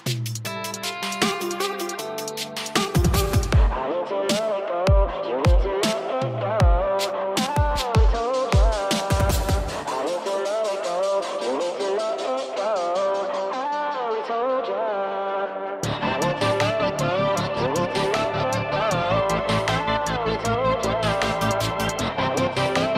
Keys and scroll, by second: 7.2 ctrl+space.